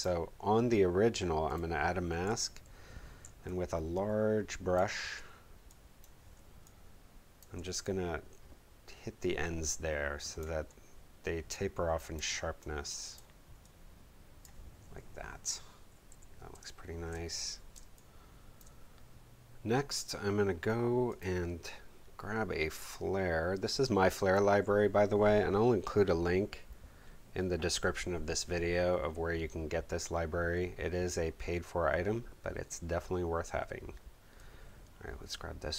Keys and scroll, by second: 2.3 b, 3.2 ctrl+alt+b, 16.1 v, 16.5 space, 17.7 space.